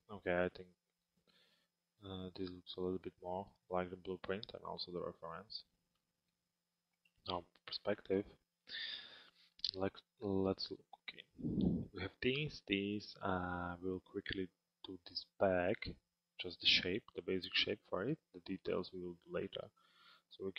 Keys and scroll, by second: 6.7 p.